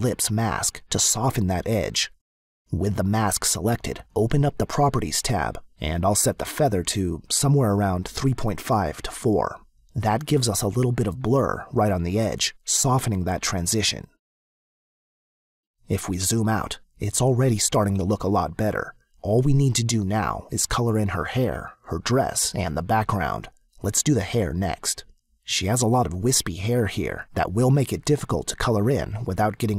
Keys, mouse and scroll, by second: 3.6 click, 7.4 click, 15.0 click, 22.4 space, 22.6 click.